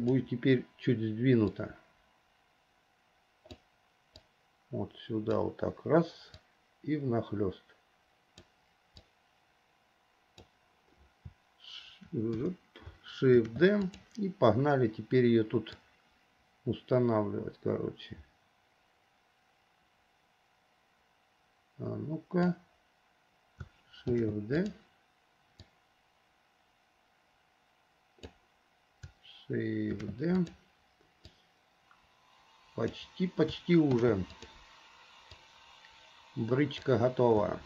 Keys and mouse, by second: 1.7-3.7 drag, 4.4-5.5 drag, 6.6-8.6 drag, 9.3-10.6 drag, 13.5 shift+d, 14.0 click, 16.0-22.6 drag, 24.3 shift+d, 25.8-28.5 drag, 30.0 shift+d, 31.4-33.6 drag, 34.1 shift+d, 35.6-37.0 drag.